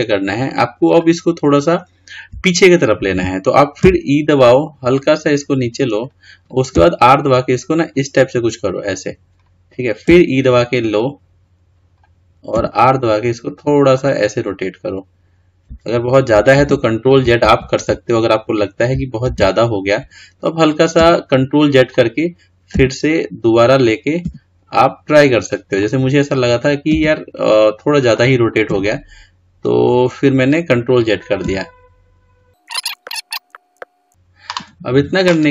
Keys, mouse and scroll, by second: 0.8 click, 3.8 e, 16.6 ctrl+z, 17.4 ctrl+z, 20.9 r.